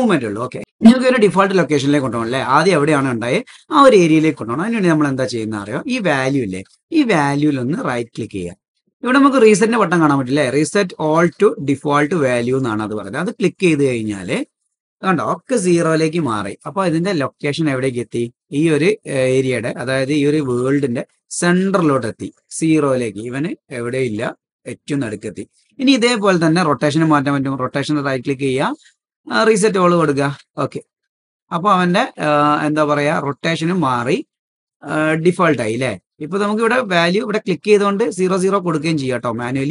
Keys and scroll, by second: 32.2 super+z, 37.2 BackSpace.